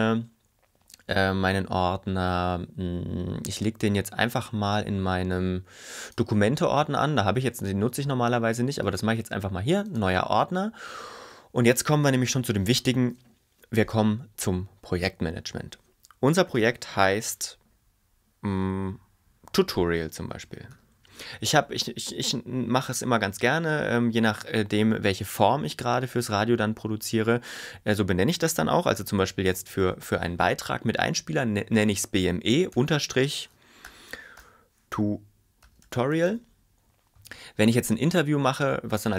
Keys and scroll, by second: 19.9-21.6 typing, 28.8-30.4 typing, 32.8 shift+/, 33.9-36.9 typing.